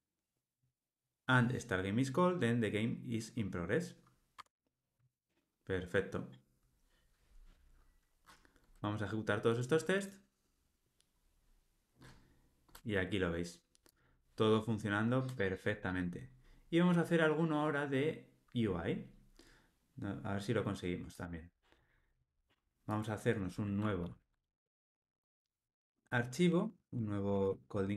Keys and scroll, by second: 4.4 Tab, 24.0 super+n.